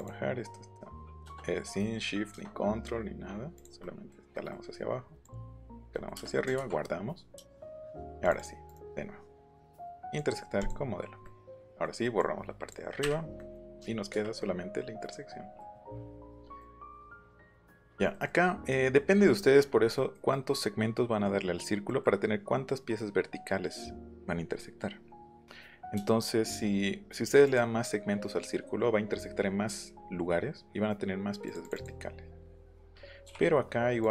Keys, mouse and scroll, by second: 0.0 click, 3.5 click, 3.8 middle click, 4.3 middle click, 5.2 click, 5.7 click, 8.2 click, 8.7 right click, 10.0 click, 10.6 click, 11.3 middle click, 11.6 middle click, 12.2 click, 13.4 middle click, 14.4-15.6 middle drag, 15.8 click, 16.1 click, 20.0 middle click, 21.9 middle click, 27.4 click, 31.5 click, 34.0 click.